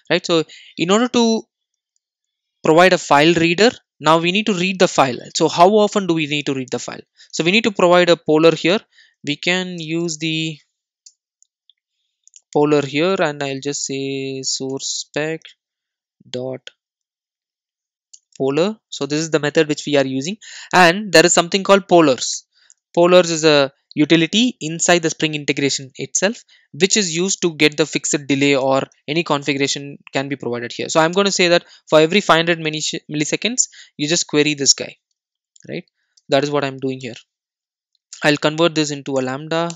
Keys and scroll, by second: 11.9 Return, 19.0 Return, 27.5 Return, 37.0 alt+super+l.